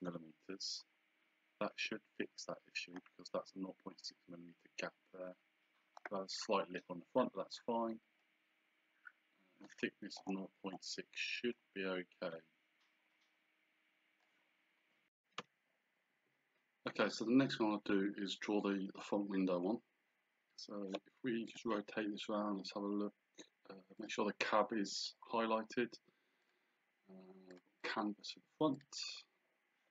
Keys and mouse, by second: 0.0 Return, 2.2 click, 4.6 click, 8.2 click, 11.6 click, 21.5 click, 24.0 click, 26.5 click, 27.5 click.